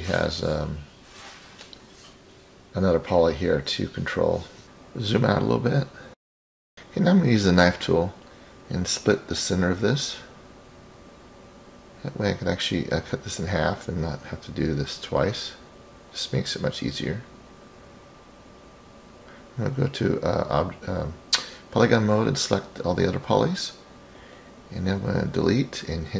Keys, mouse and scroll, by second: 6.1-6.4 scroll down 1, 6.5 click, 8.3-12.9 drag, 18.7 click, 19.6 click, 20.2 click, 21.7 shift+click, 23.4 Delete.